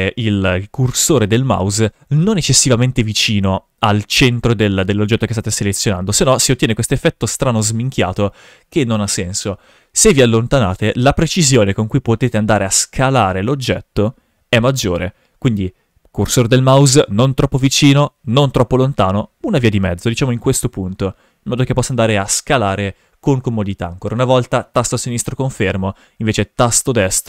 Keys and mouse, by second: 5.8 s, 8.8 right click, 10.8 s, 14.8 right click, 20.2 s, 24.7 click, 25.5 ctrl+z, 26.0 s.